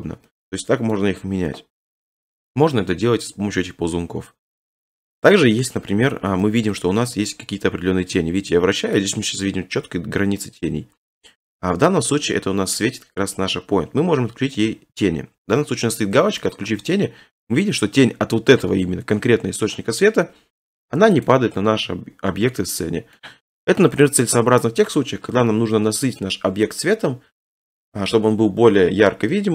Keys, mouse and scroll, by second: 1.0 middle click, 5.3 middle click, 5.9 middle click, 6.0 middle click, 6.5 shift+middle click, 6.8 middle click, 8.9-11.0 middle drag, 11.5-13.6 middle drag, 14.7 middle click, 14.7-16.5 scroll, 16.5 click, 17.5 click, 21.3 click, 23.2 middle click.